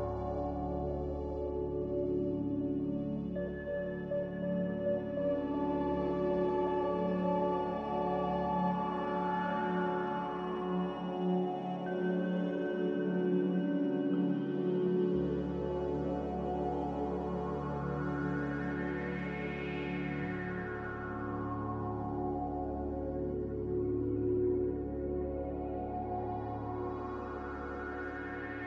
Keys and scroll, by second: 1.1 Return, 1.1 0, 2.5 Return, 2.5 0, 5.0 n, 25.3 a.